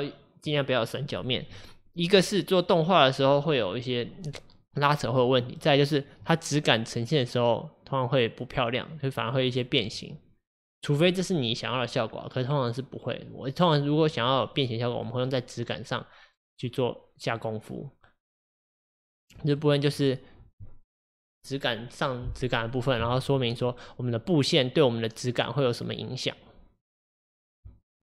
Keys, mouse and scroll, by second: 5.8-6.1 scroll up 4, 6.4-9.5 middle drag, 9.5-9.9 scroll down 2, 9.9-13.0 middle drag, 15.1-18.1 middle drag, 19.6-28.0 middle drag.